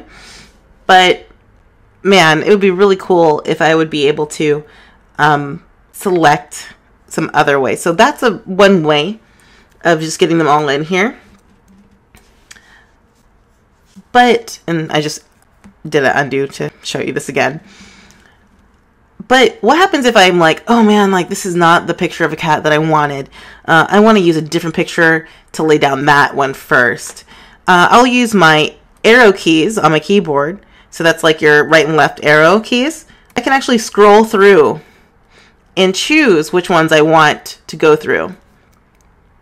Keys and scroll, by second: 12.6 super+z, 35.4 Right.